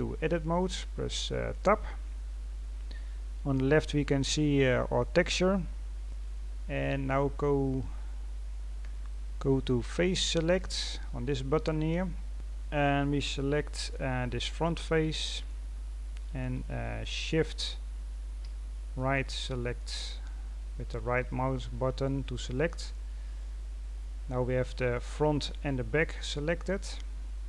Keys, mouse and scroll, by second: 3.5-4.0 scroll down 4, 4.0-6.0 scroll up 2, 6.0-7.3 scroll up 1, 12.3-17.3 middle drag, 17.3 shift+right click, 18.9-20.0 middle drag, 20.0-20.5 scroll up 4, 20.5-21.2 scroll down 2, 21.2-25.3 middle drag, 25.3 scroll down 1, 25.4-27.4 middle drag.